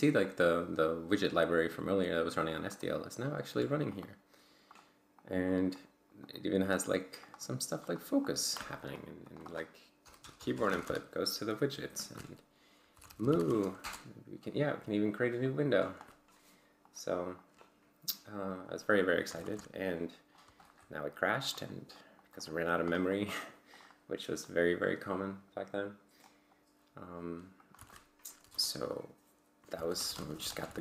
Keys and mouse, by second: 0.2 click, 0.9-2.4 drag, 2.6 click, 3.9 click, 4.7 click, 5.2 click, 5.5 click, 6.2 click, 6.7 click, 7.2 click, 7.8 click, 8.8 click, 9.3 click, 10.0 BackSpace, 12.7-13.8 typing, 15.2 click, 16.8 click, 17.4-18.5 drag, 18.9 click, 19.7 ctrl+alt+g, 20.6 ctrl+click, 21.5 click, 21.9-23.5 drag, 23.7 click, 25.1 click, 26.3 click, 27.6 ctrl+click, 27.8 ctrl+c, 28.4 q, 28.5 Return, 29.5-30.8 typing.